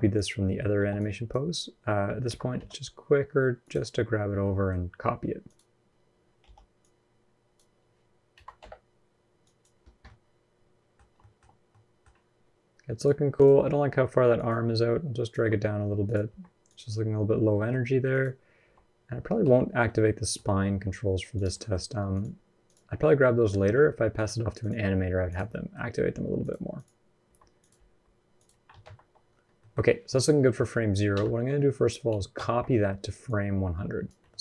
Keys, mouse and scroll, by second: 0.5 b, 4.2 middle click, 4.5-5.0 scroll up 1, 5.2 click, 6.2 b, 9.6 scroll down 8, 9.8 middle click, 10.9 scroll up 1, 11.0 shift+middle click, 11.5 middle click, 11.9-12.7 scroll down 1, 12.7 click, 13.2 click, 13.6 r, 14.4 r, 16.1 r, 17.4 middle click, 17.6-17.9 scroll up 1, 17.9 click, 18.4 r, 19.7 middle click, 20.5 r, 21.4 middle click, 21.9 click, 22.5 click, 22.9 r, 24.4 click, 24.9 r, 25.3 middle click, 25.9 r, 26.6 click, 27.1 r, 27.5 r, 28.6 alt+r, 29.1-29.7 scroll down 4, 29.4 middle click, 29.7-30.1 scroll up 2, 30.9 a, 32.2 ctrl+c, 33.1 click, 34.2 middle click, 34.2-34.4 scroll up 1.